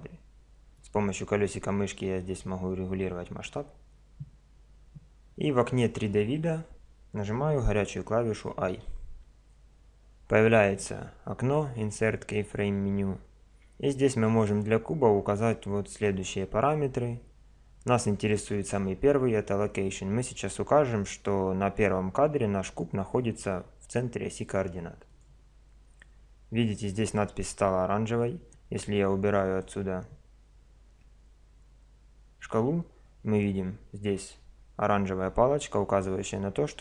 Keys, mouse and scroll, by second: 1.2-1.7 middle drag, 4.0-4.7 middle drag, 8.7 i, 28.5 click.